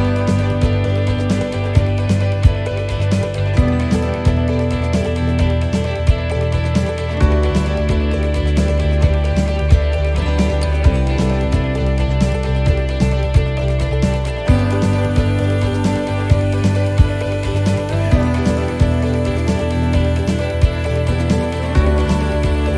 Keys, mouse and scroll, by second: 0.4 shift+right click, 0.9 middle click, 1.3 c, 5.5 shift+right click, 5.5 c, 6.8 middle click, 7.7 middle click, 8.6 u, 9.8 middle click, 10.1-10.5 scroll up 4, 10.7 shift+middle click, 11.0 scroll down 1, 12.6-13.0 scroll up 1, 13.2 shift+middle click, 13.6 scroll up 1, 14.1 right click, 14.8 right click, 15.1 shift+right click, 15.3 shift+right click, 16.0 right click, 16.6 shift+right click, 17.5 right click, 17.6-22.7 shift+right click.